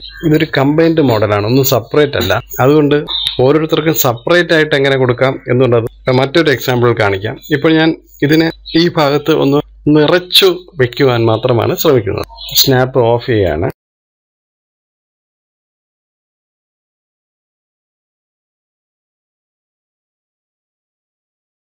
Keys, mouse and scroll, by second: 12.2 click, 13.6 click, 14.6 click, 15.0 click, 15.3 click, 17.2 shift+click, 17.8 click, 18.4 click, 18.7 click, 19.1 click, 19.9 click, 20.9 click, 21.2 KP_1.